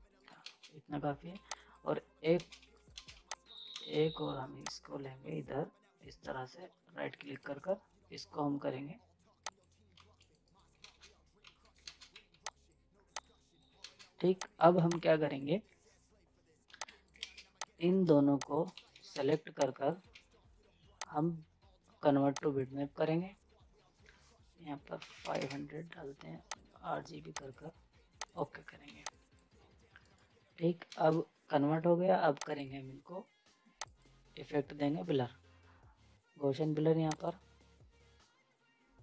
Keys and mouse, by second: 0.1 right click, 0.4 space, 1.3 z, 1.5 click, 2.4 ctrl+space, 2.6 z, 2.7 right click, 2.9 space, 3.1 z, 3.3 click, 3.7 ctrl+space, 4.7-7.2 drag, 7.2 ctrl+right click, 9.5 click, 10.0 z, 10.1 right click, 10.8 ctrl+space, 11.4 z, 11.6 right click, 11.6 right click, 11.9 ctrl+space, 12.1 z, 12.5 click, 13.8 ctrl+space, 14.4 click, 14.8 z, 14.9-16.7 drag, 16.7 z, 16.8 click, 17.3 ctrl+space, 17.6 click, 18.4 click, 18.7 z, 18.8 right click, 19.1 space, 19.7 click, 20.1 ctrl+z, 21.0 click, 26.5 click, 28.8 z, 29.1 click, 30.0 right click, 30.9 space, 32.4 click, 37.1 click.